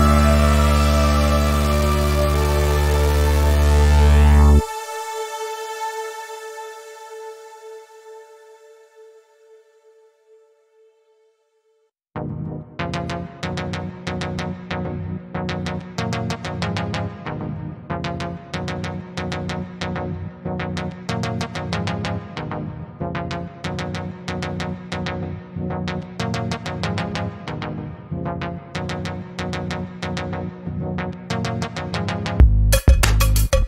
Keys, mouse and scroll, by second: 4.8 v, 5.0-7.2 drag, 9.0 ctrl+z, 9.3-10.5 drag, 12.8 shift+click, 14.7-15.3 click, 15.5 ctrl+z, 18.0 right click, 22.7 click, 25.2 right click, 26.7 click, 29.8-33.0 drag.